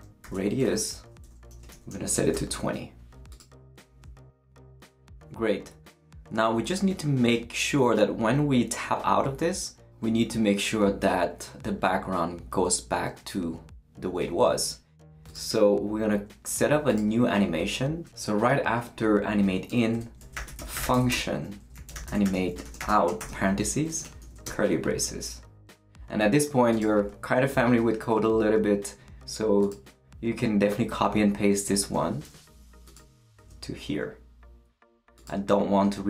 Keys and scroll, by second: 0.0-2.8 typing, 0.6 Return, 19.7 Return, 20.0-24.2 typing, 23.8 shift+Right, 24.4 shift+Return, 25.4 Return, 32.2 super+c.